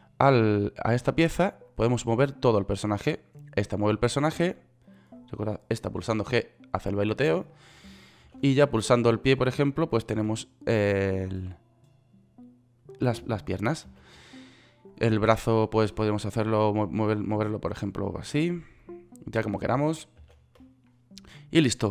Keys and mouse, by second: 6.6 g, 8.9 ctrl+z, 10.7 g, 14.5 ctrl+z, 20.9 ctrl+z.